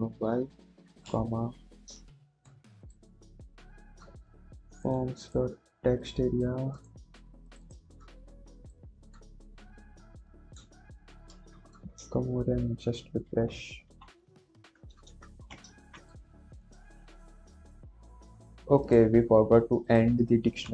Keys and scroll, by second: 0.8 /, 2.2 ctrl+s, 15.7 ctrl+`.